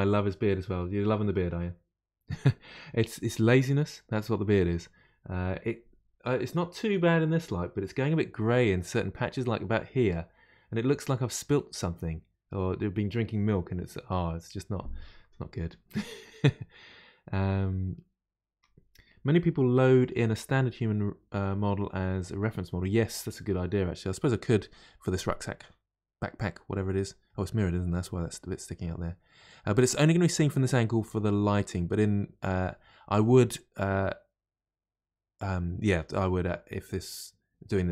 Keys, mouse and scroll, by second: 24.6-25.0 scroll down 3, 25.0-28.0 middle drag, 28.2-30.1 middle drag, 30.1-31.2 scroll down 1, 31.2-34.2 middle drag.